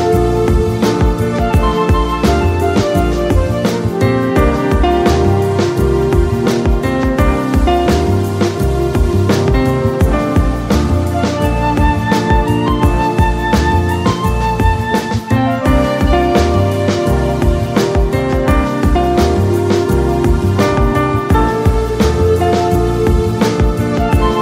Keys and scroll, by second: 2.6 space, 9.3 Return, 17.3 ctrl+l.